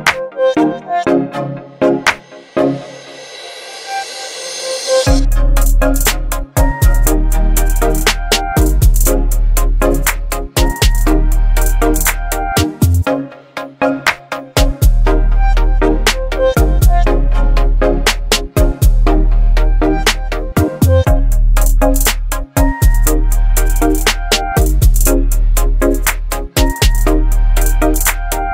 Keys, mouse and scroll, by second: 2.0 click, 4.6-6.2 drag, 9.1 ctrl+t, 11.4-18.6 drag, 22.4 click, 23.2 click, 24.0 alt+scroll up 1, 24.8 space, 24.8-25.4 click, 27.4 ctrl+t.